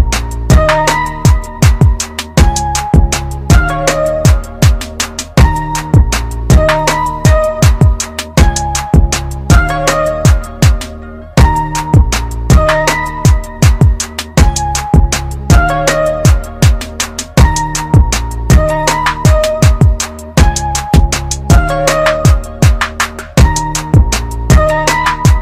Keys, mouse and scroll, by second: 2.9 KP_2, 4.0 click, 5.5 click, 10.4 click, 16.6 click.